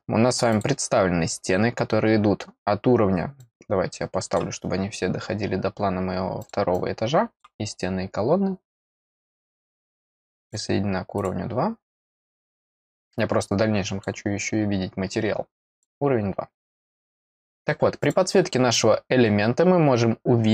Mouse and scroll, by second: 0.5 click, 3.3 click, 6.4 click, 6.7 click, 9.1 click, 9.5 click, 10.4 click, 11.1 click, 13.4 click, 15.7 click, 18.0 click, 19.1 middle click.